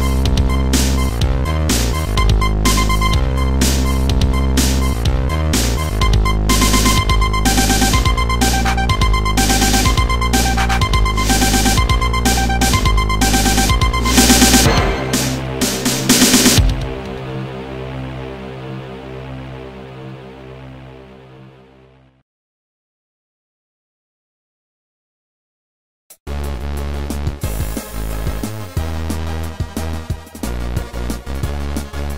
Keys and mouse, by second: 1.1 ctrl+z, 2.2 click, 4.7 ctrl+z, 4.7 click, 7.1 click, 8.8 click, 11.4 shift+click, 14.4 click, 16.3 shift+click, 19.0 click, 21.9 click, 24.8 right click, 25.7 click, 26.0 click, 27.4 click, 28.4 click, 29.3 ctrl+z, 30.0 click, 30.9 ctrl+z, 30.9 click, 31.2 click.